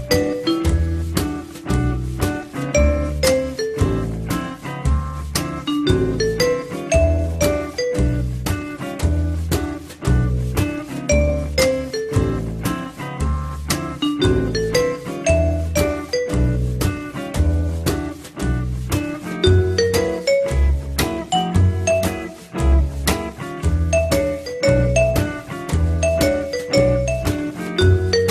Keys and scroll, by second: 27.2 r.